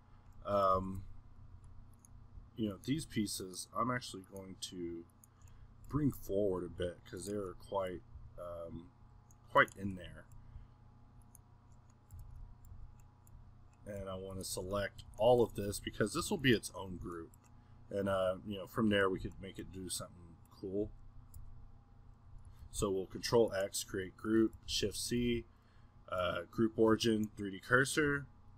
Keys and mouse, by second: 0.8 g, 1.8 middle click, 2.0-5.6 drag, 5.6 middle click, 5.9 g, 6.9-8.1 middle drag, 8.1 s, 11.3-12.7 middle drag, 12.9 ctrl+z, 14.3-15.7 middle drag, 15.7 z, 16.7-17.8 middle drag, 17.9-18.9 middle drag, 19.6-20.8 middle drag, 20.8 z, 21.4 g, 22.4 middle click, 23.8-24.7 middle drag, 28.1 g.